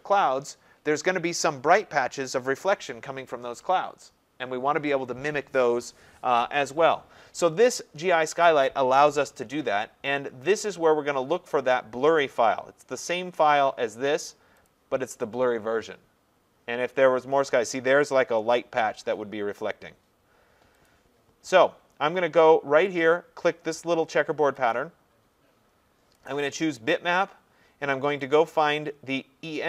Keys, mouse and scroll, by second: 12.2 click, 14.7 click, 20.9 click, 24.7 click, 26.3 click, 28.4 click.